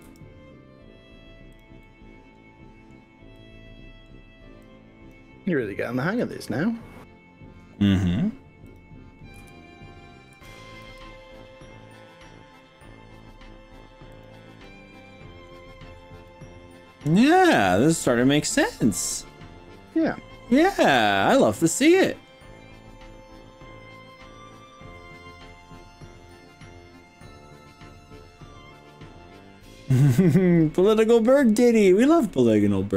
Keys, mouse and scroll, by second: 0.0 g, 1.5 click, 1.8-2.9 middle drag, 3.4 middle click, 4.7 click, 6.2 g, 8.7 click, 9.5 KP_1, 10.4 KP_3, 10.9 g, 14.1 click, 14.6-15.5 middle drag, 15.7-16.3 scroll down 4, 16.3-22.3 middle drag, 26.3-31.7 middle drag, 32.1-32.7 scroll up 3.